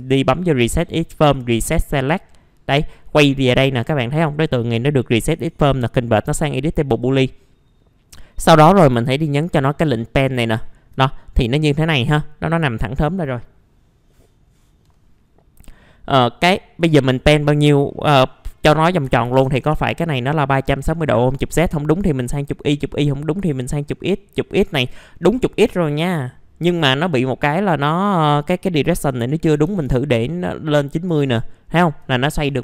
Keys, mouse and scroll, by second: 5.3 right click, 6.9 click, 8.9 b, 9.8 click, 10.6-11.6 alt+middle drag, 16.5-17.6 drag, 19.0 KP_3, 19.2 KP_6, 21.5 click, 24.9 alt+middle click, 25.4-25.7 scroll up 1, 27.9 click, 29.4 KP_9, 29.6 KP_0, 30.8 middle click, 31.2 alt+middle click, 32.1-32.6 scroll up 1.